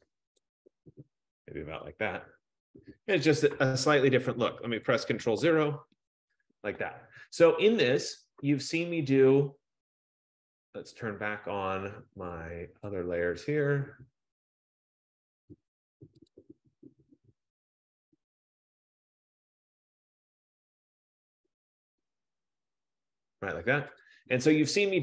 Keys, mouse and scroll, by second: 0.5 click, 2.2 click, 5.6 ctrl+0, 7.8 click, 12.8 F15, 15.5 click, 16.5 click, 22.3 click, 23.0 click, 24.1 click.